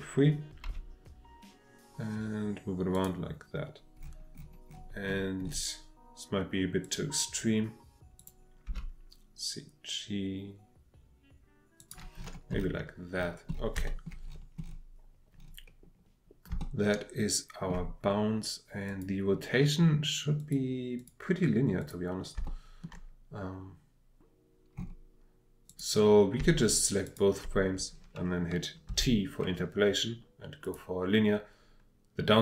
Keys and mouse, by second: 0.7 g, 2.9 click, 6.8 click, 8.2 click, 8.7 g, 11.8 click, 13.7 shift+middle click, 16.6-17.7 shift+middle drag, 18.8 click, 20.4-21.2 drag, 21.8 click, 22.3-25.7 shift+middle drag, 25.7 click, 26.4-27.4 shift+drag, 28.9 t.